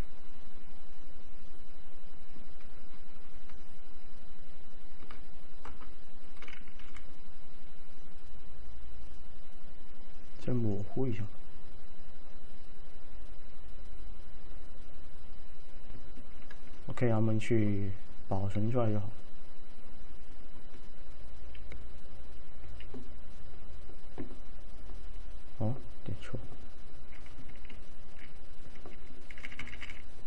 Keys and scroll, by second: 5.8 Return, 6.9 v, 29.4 f.